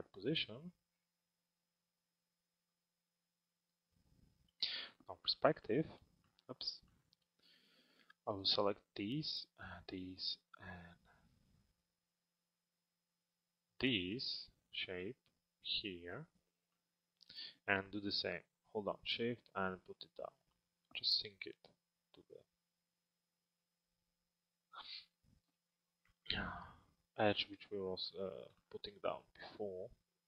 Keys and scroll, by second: 4.2 p.